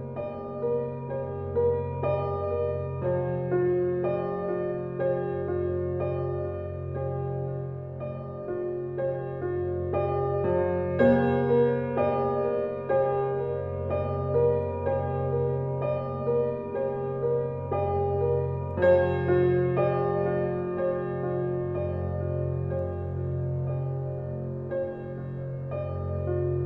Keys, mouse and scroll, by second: 0.6 alt+click, 1.2-2.8 right drag, 2.8 click, 3.3 shift+click, 13.0 right click, 13.6 click, 14.7 scroll down 1, 15.2 alt+click, 16.7 alt+right click, 16.8-19.0 alt+drag, 19.0 alt+click, 20.1 scroll down 1, 20.3 alt+click, 21.1 ctrl+s, 23.9 ctrl+s, 24.0 scroll up 1, 24.3 alt+click, 24.5 alt+right click, 24.9 alt+middle click.